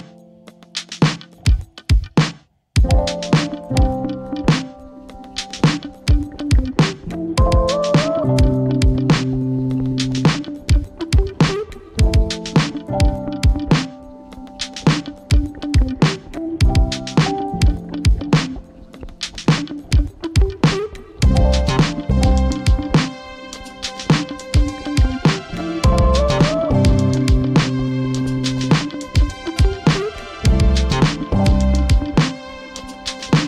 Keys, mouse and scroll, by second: 0.0-7.2 typing, 2.2 Tab, 8.6-12.7 typing, 14.5-15.7 typing, 15.9 Right, 18.5-19.6 right drag, 19.6 click, 22.1 ctrl+o, 22.9 Return, 26.4 ctrl+x, 31.1-33.4 drag.